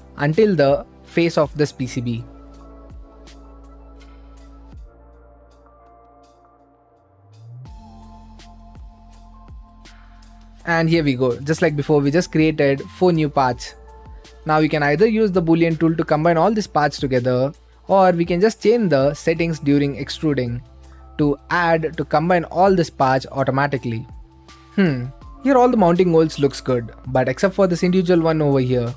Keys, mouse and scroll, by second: 0.1 middle click, 0.4 click, 2.1-3.2 drag, 3.3-4.4 drag, 5.1-6.2 drag, 6.4-8.1 right drag, 9.2-10.3 drag, 11.2 click, 12.2 shift+click, 14.1 ctrl+click, 16.2-17.3 drag, 17.9 middle click, 18.0 click, 19.9-21.0 drag, 21.3-22.6 right drag, 22.6 middle click, 23.1 right click, 23.8 click, 24.4-27.2 right drag, 27.2 middle click, 27.4-28.9 right drag.